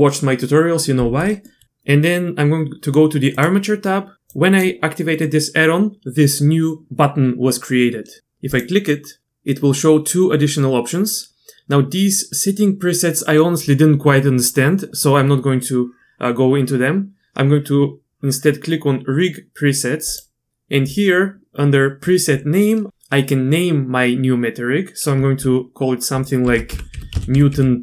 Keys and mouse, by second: 1.5 middle click, 4.4 click, 8.5-17.1 drag, 20.1 click, 20.5-27.8 drag.